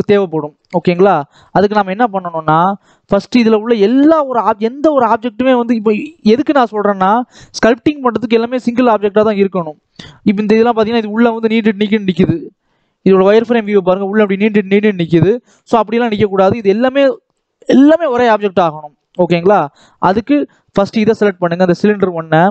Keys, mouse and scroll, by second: 0.2-0.5 scroll up 1, 0.5 middle click, 1.2 click, 1.5 middle click, 1.8 scroll up 2, 2.1 middle click, 2.7-3.2 scroll down 1, 3.2-4.2 drag, 4.6 scroll up 1, 4.9 scroll down 1, 5.1 middle click, 5.4-5.9 scroll up 5, 5.9 shift+middle click, 6.4 scroll down 1, 6.6 middle click, 7.4-7.8 scroll down 1, 7.8 scroll up 1, 8.1-9.2 shift+middle drag, 9.2-9.6 scroll up 2, 9.6-11.0 middle drag, 11.0-11.6 scroll down 1, 11.6-12.4 scroll down 2, 12.4 click, 13.0 click, 13.3 middle click, 13.7-14.8 scroll up 1, 14.8-15.2 scroll down 1, 15.2 shift+middle click, 16.1-18.5 scroll up 1, 18.5-19.4 scroll down 1, 19.4 click, 19.8-20.4 scroll up 1, 20.5 click, 21.1-22.2 shift+middle drag.